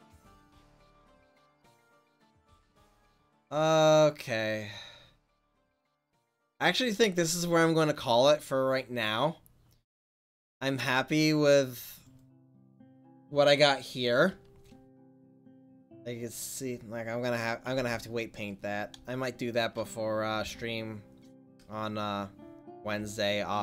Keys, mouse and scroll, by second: 3.0-6.6 drag, 6.6-7.6 middle drag, 11.4-13.8 right drag, 15.2 r, 18.3 middle click, 20.3 r.